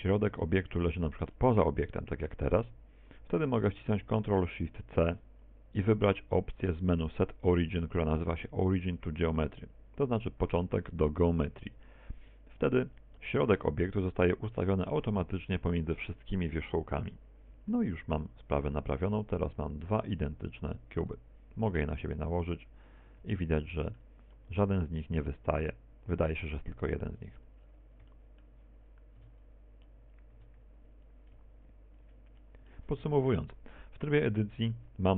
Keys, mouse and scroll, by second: 0.7 click, 2.3 Tab, 2.9 middle click, 3.5 r, 6.7 ctrl+alt+shift+c, 19.0 KP_1, 20.9 click, 23.1 right click, 23.6 g, 25.3 ctrl+click, 25.4 middle click, 26.3 middle click, 27.3 middle click, 29.7-30.9 scroll up 4, 30.1 shift+middle click, 30.9-31.2 scroll down 3, 31.2 Tab, 32.4 Tab, 33.1 click, 34.5 middle click.